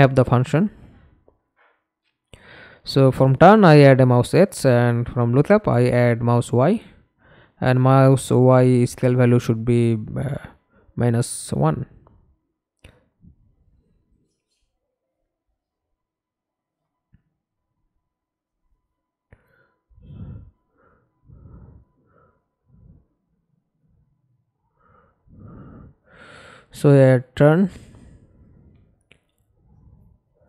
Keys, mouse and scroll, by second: 0.3-1.8 typing, 4.6-6.1 typing, 15.7 Left, 16.1 -, 16.6 Return, 19.9 right click, 21.3 right click, 22.8-23.7 typing, 24.8-26.4 scroll up 7, 26.4-28.3 scroll up 1, 28.3 right click, 28.8 right click, 30.0-30.4 typing.